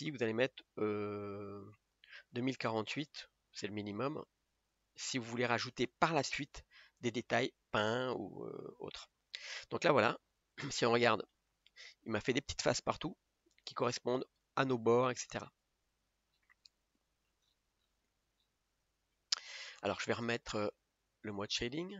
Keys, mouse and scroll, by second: 8.6 click, 10.4 a, 13.7 scroll up 5, 16.4-16.7 scroll down 5, 17.0 middle click, 17.4-17.9 scroll up 9, 18.4-18.8 scroll down 7, 19.0 Tab, 19.5 scroll up 3.